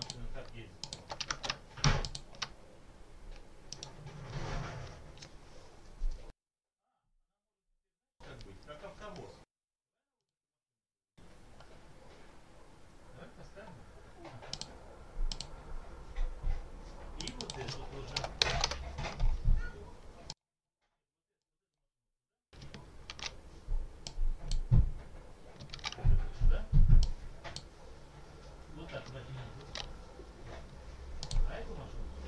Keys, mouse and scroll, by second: 0.7 shift+click, 1.2 ctrl+shift+a, 1.9 ctrl+click, 3.6 right click, 10.0 click, 14.4 click, 15.2 click, 17.0 click, 18.0 0, 18.3 ., 18.6 Return, 20.2 click, 21.3 click, 23.0 ctrl+z, 23.9-24.6 drag, 26.9-27.6 drag, 29.5 ctrl+z, 31.1 click.